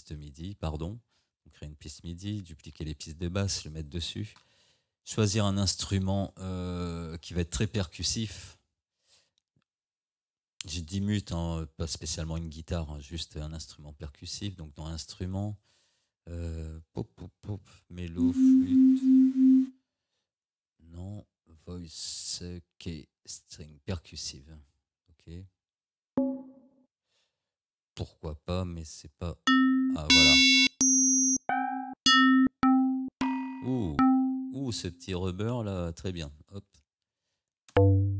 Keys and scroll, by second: 37.8 space.